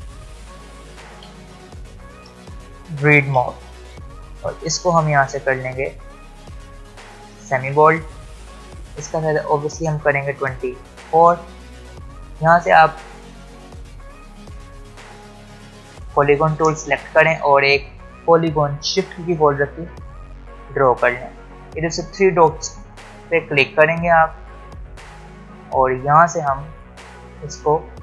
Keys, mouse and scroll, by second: 0.5-3.3 typing, 5.6 click, 10.1-12.9 drag, 13.0 ctrl+alt+scroll up 1, 17.3-18.5 ctrl+scroll down 2, 19.2-21.6 shift+drag, 22.6 ctrl+alt+scroll up 1, 24.6 ctrl+alt+scroll down 1, 25.1 click, 26.9-27.2 scroll up 1.